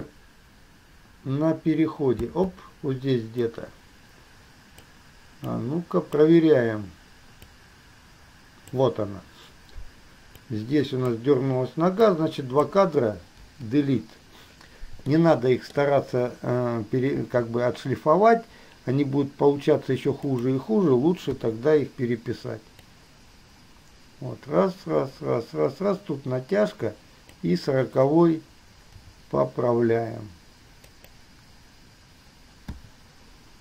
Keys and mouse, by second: 3.0-5.1 drag, 3.0 space, 5.6-6.4 drag, 7.6-8.9 drag, 10.6 click, 12.4-12.9 drag, 13.6 Delete, 15.3-15.9 shift+middle drag, 17.4 g, 21.5 i, 23.1-27.6 drag, 29.1 g, 33.0 i.